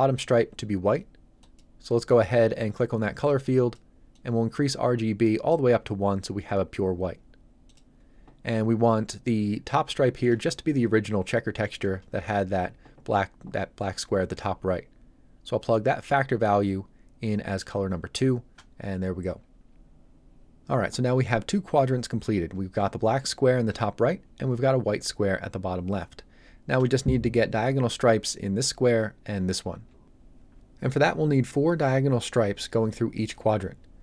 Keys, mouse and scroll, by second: 1.4 click, 7.6 click.